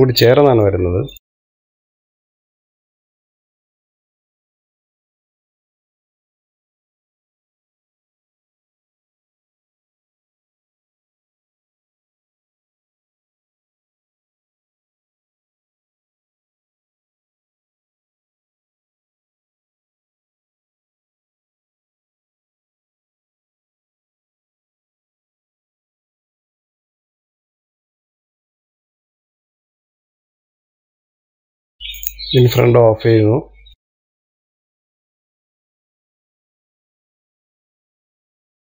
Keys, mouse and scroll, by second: 0.7 click, 1.2 middle click, 1.4 shift+click, 1.5 shift+click, 1.7 middle click, 1.9 shift+click, 2.0 middle click, 2.2 shift+click, 2.5 shift+click, 2.8 shift+click, 3.0 shift+click, 3.2 shift+click, 3.3 shift+click, 3.9 shift+click, 4.1 scroll down 3, 4.2 middle click, 4.7 ctrl+i, 5.1 h, 5.4 middle click, 5.9 click, 7.7 shift+middle click, 7.9 click, 9.6 click, 9.9 click, 10.1 click, 10.3 click, 10.7 shift+click, 11.9 KP_1, 12.3 click, 12.7 shift+middle click, 13.5 click, 13.7 middle click, 14.1 shift+click, 14.3 middle click, 14.7 click, 15.0 middle click, 15.2 click, 15.7 KP_1, 16.5 click, 17.3 click, 17.7 middle click, 18.1 click, 18.4 middle click, 18.6 KP_1, 18.8 shift+middle click, 19.2 click, 20.6 click, 21.1 KP_3, 21.7 click, 22.0 KP_1, 22.4 click, 22.9 KP_3, 23.4 middle click, 24.1 KP_1, 24.7 click, 25.5 shift+middle click, 25.8 click, 26.4 shift+click, 26.7 middle click, 27.1 click, 27.3 click, 27.8 KP_1, 28.1 click, 28.4 shift+middle click, 28.6 click, 29.2 click, 29.9 click, 30.3 shift+middle click, 30.7 click, 31.1 scroll down 2, 31.2 middle click, 31.6 KP_3, 33.1 click, 33.7 middle click, 34.3 scroll up 1, 34.6 click, 34.9 middle click, 35.2 click, 35.8 click, 36.5 middle click, 37.2 click, 37.5 middle click, 37.8 click, 38.5 middle click.